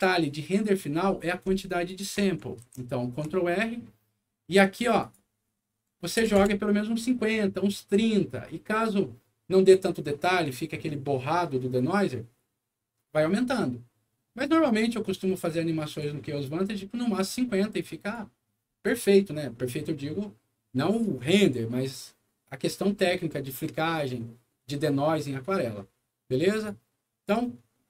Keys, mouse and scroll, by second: 1.8 click, 2.6 ctrl+r, 4.7 ctrl+click, 5.0 ctrl+click, 6.1 5, 6.4 KP_0, 15.4 click, 17.1 click, 17.8 click, 26.5 click.